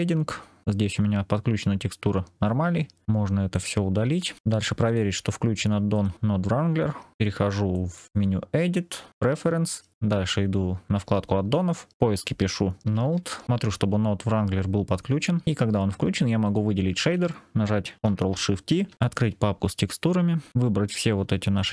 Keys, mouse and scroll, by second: 0.0 click, 3.0-3.4 scroll down 4, 3.4-4.4 drag, 4.4 Delete, 4.7-6.1 drag, 8.0-9.9 drag, 16.3 click, 18.7 ctrl+shift+t.